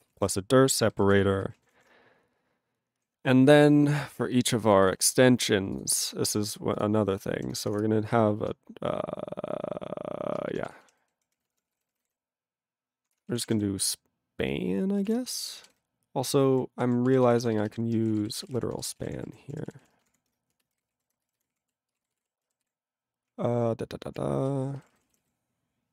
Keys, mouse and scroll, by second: 0.1 ctrl+space, 0.1 ctrl+a, 0.1 ctrl+p, 0.9 ctrl+g, 1.0 ctrl+n, 1.1 ctrl+e, 1.4 ctrl+n, 1.5 ctrl+a, 1.7 ctrl+o, 1.7 Tab, 4.0 click, 4.7 click, 4.8 click, 4.9 click, 5.4 click, 5.5 click, 5.7 click, 5.8 click, 6.2-6.7 scroll up 2, 6.7 click, 6.8 click, 7.4 ctrl+n, 7.7 Return, 7.7 Return, 10.4-14.8 typing, 15.2 ctrl+e, 15.9-16.5 ctrl+n, 16.8 ctrl+p, 17.1 ctrl+e, 17.2 ctrl+b, 17.4 ctrl+b, 17.5 ctrl+b, 17.7 ctrl+b, 17.8-20.8 typing, 19.9 ctrl+d, 21.0 ctrl+a, 21.1 ctrl+space, 21.2 ctrl+n, 21.3 ctrl+n, 21.4 ctrl+w, 21.5 ctrl+p, 21.6 ctrl+e, 21.9 ctrl+space, 22.0 ctrl+a, 22.1 ctrl+g, 22.2 ctrl+e, 22.7 ctrl+s, 23.3-24.1 ctrl+p, 24.6 ctrl+p, 24.7 ctrl+b, 24.8 ctrl+p, 24.9 ctrl+b, 24.9 ctrl+p, 25.0 ctrl+b, 25.1 ctrl+p, 25.2 ctrl+b, 25.2 ctrl+p, 25.7 ctrl+p.